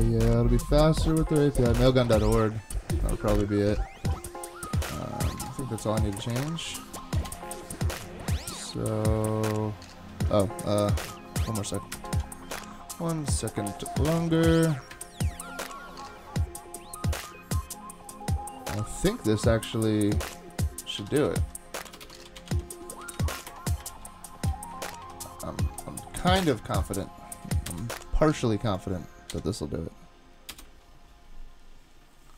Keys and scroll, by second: 12.0 alt+super+0, 30.5 Return.